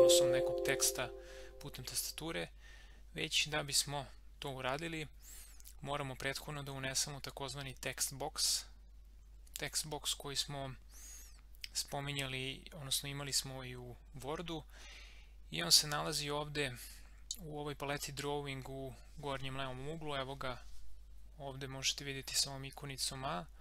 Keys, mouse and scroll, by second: 0.0-0.1 typing.